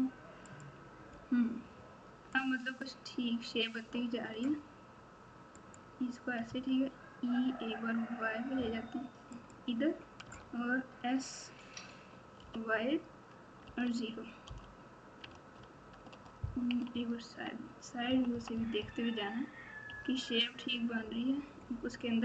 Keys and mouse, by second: 2.3-3.4 drag, 4.3 s, 6.4 e, 10.2 s, 15.3 alt+z, 16.1 alt+z, 16.7 KP_6, 16.9 KP_6, 18.0 KP_4, 18.3 KP_4, 18.7 KP_4, 19.9 KP_6.